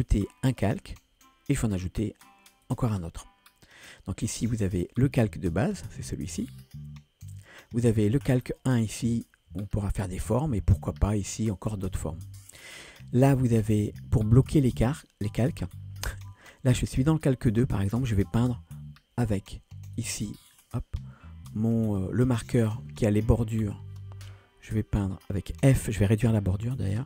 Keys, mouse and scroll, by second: 7.4-17.5 drag, 20.0 click, 20.4-24.0 drag.